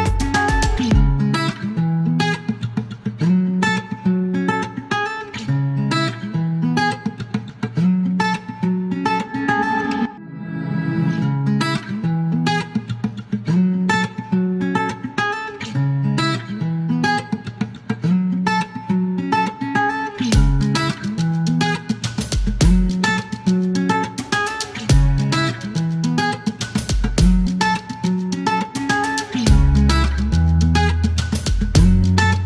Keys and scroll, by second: 1.0-2.2 typing, 3.4-4.3 typing, 5.4-6.1 typing, 7.4 q, 9.9 alt+e, 10.7 Delete, 12.3 KP_9, 17.8 space, 18.2 KP_0, 19.1 KP_0, 19.4 Return, 22.9-23.6 typing, 24.0 alt+q, 27.5 typing, 28.1 alt+q, 28.8 alt+e, 29.5 q, 31.9 space.